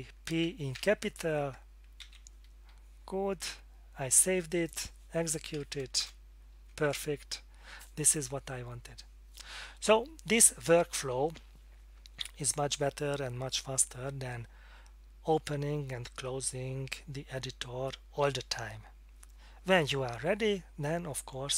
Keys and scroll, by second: 0.7 p, 2.0 ctrl+s, 2.5 Escape, 6.0 Return.